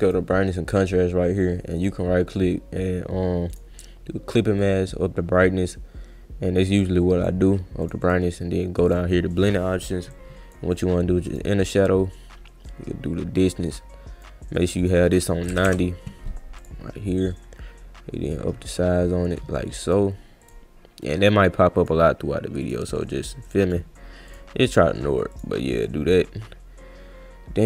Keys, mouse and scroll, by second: 0.0 click, 1.8 right click, 3.5 click, 4.6-7.2 drag, 7.8 click, 8.0 click, 8.9 click, 10.1 click, 11.3 click, 11.6 click, 12.9 click, 14.6 click, 14.8 click, 16.6 click, 18.3-19.9 drag, 20.4 click, 21.1 click, 22.6 click, 23.5 drag, 24.3 click, 25.3 click.